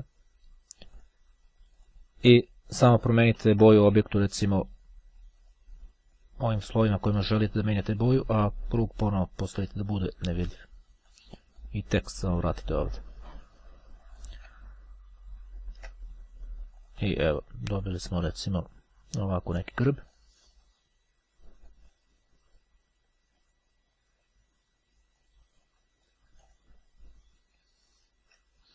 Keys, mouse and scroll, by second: 1.0 click, 2.0 click, 3.0 click, 5.3 click, 8.0 click, 9.7 click, 11.2 click, 14.7-15.2 ctrl+scroll up 2, 17.0 click, 18.0 click, 20.0 click, 21.8-24.2 drag, 25.4-27.0 drag, 27.4-28.5 ctrl+scroll down 2.